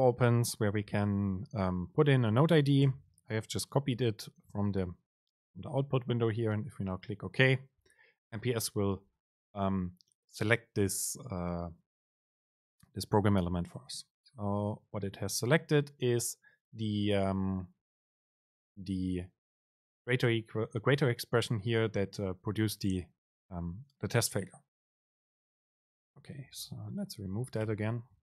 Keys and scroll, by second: 3.0 super+v, 27.0 End, 27.4 BackSpace.